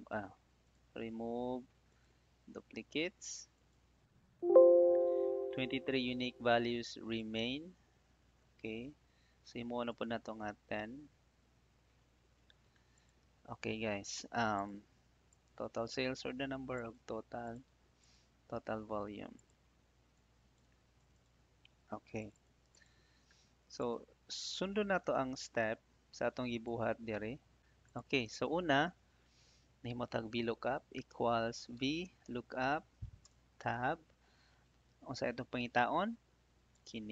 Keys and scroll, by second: 10.9 ctrl+shift+Down, 11.4 Delete, 16.1 ctrl+c, 18.8 ctrl+v, 31.0 =, 33.2 Tab.